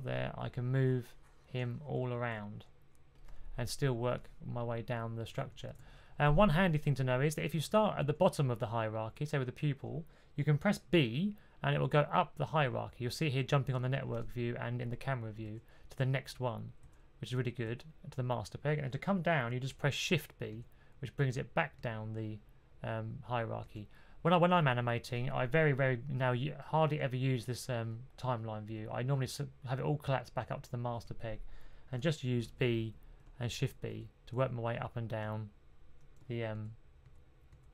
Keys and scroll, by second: 2.1 super+z, 5.6 super+z, 11.6 b, 15.3 b, 16.7-17.5 typing, 20.4-21.7 typing, 23.5 typing, 32.3-33.7 typing, 36.5-37.4 typing.